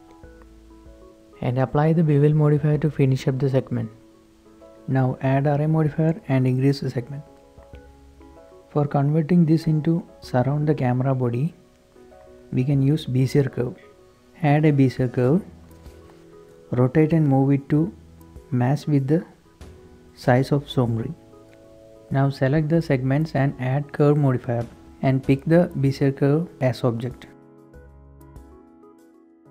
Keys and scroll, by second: 1.8 Right, 1.8 Left, 1.8 Return, 1.8 KP_0, 5.1 shift+Tab, 5.7 shift+Tab, 11.0 shift+a, 15.2-16.9 typing, 16.0 Return, 16.7 Tab, 18.6 typing, 19.9 s, 20.4 Tab, 28.8-29.5 typing.